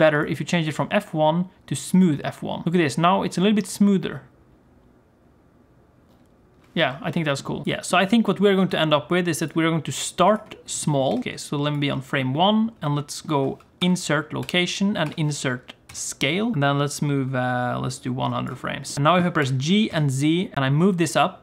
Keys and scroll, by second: 2.6 g, 7.6 g, 7.6 s, 8.5 s, 11.1 g, 13.7 i, 15.0 i, 19.3 g.